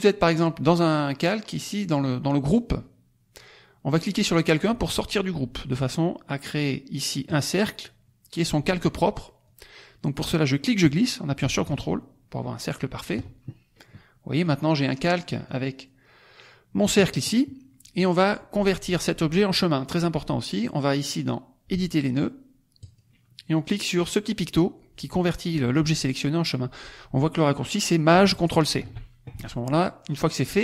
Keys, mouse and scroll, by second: 4.2 click, 7.2 click, 9.4-13.2 drag, 15.0 click, 15.4 click, 22.7 click, 28.7 ctrl+shift+c, 30.2 click.